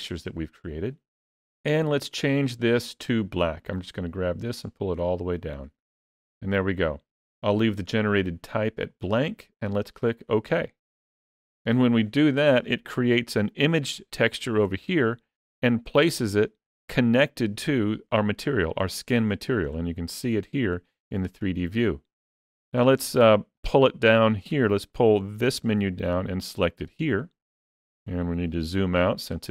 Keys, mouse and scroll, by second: 12.4-12.8 scroll up 4, 12.8 middle click, 14.1 middle click, 14.7 click, 15.3 click, 15.8 click, 20.3 middle click, 21.3 shift+middle click, 23.4 click, 27.7-28.3 scroll down 1, 28.3-29.5 scroll down 11.